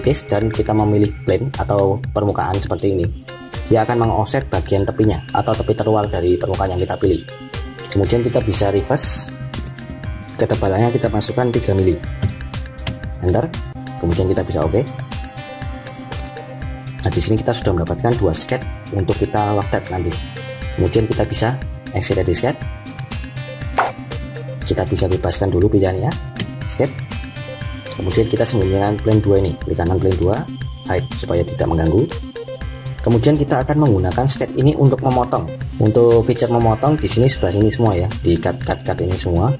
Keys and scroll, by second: 12.8 Return, 26.2 Escape.